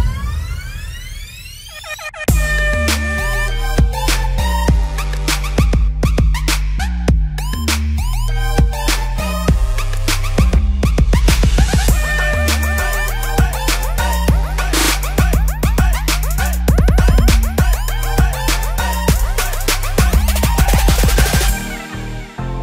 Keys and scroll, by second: 17.9 v.